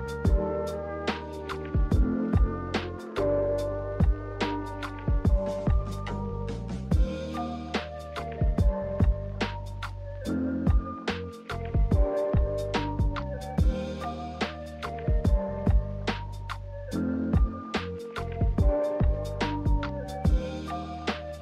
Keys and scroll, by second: 3.4 z.